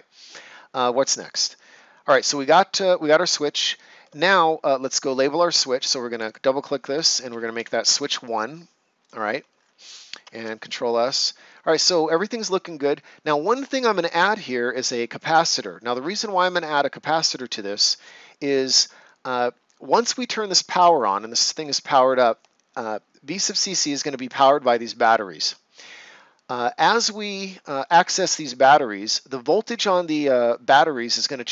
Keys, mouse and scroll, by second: 3.4 ctrl+scroll up 1, 6.0 click, 7.5 BackSpace, 7.6 1, 7.9 Return, 9.0 click, 9.5 ctrl+scroll down 1, 9.9 right click, 10.3 ctrl+s.